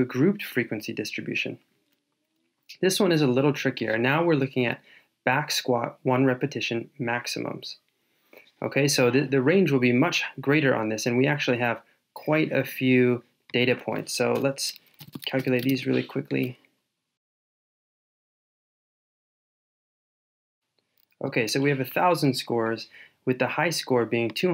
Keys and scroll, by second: 17.2 shift+super+Down, 17.8 shift+super+Page_Down, 18.5 super+c, 19.1 super+v.